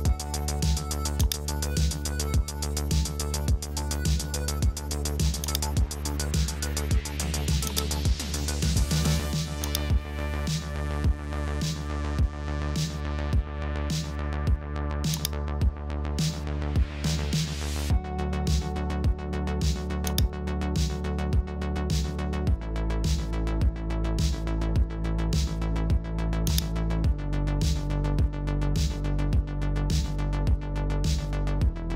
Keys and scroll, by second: 23.4 super+t, 31.6 Return.